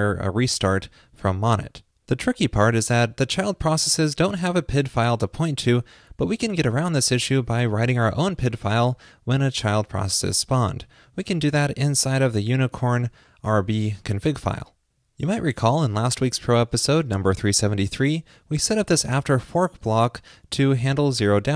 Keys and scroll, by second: 11.1 super+s.